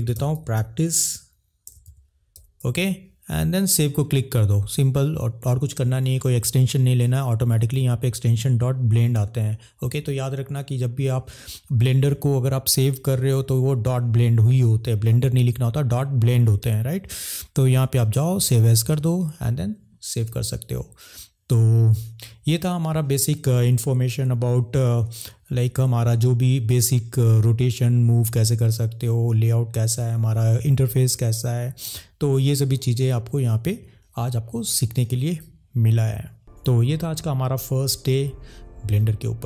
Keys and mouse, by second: 36.5 click.